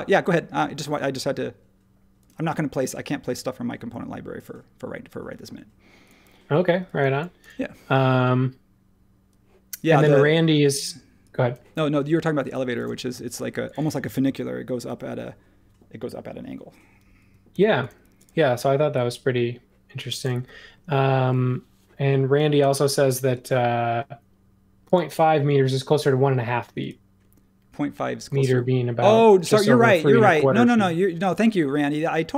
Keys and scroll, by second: 12.9 space, 17.5 super+g.